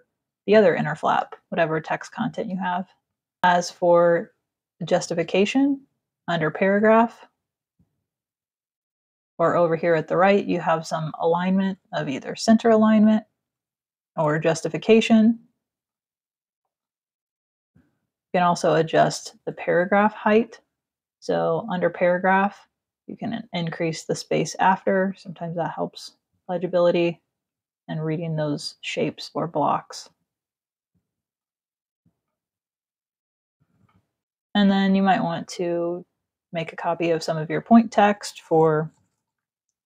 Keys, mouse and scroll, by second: 0.8 space, 0.9 click, 2.8 click, 5.9 click, 14.1 click, 15.5 click, 16.2 click, 20.8 click, 23.8 click, 24.7 click, 25.6 click, 31.0 click, 32.5 click, 33.0 click, 34.2 space, 34.5 alt+click, 37.1 click, 39.1-39.8 typing.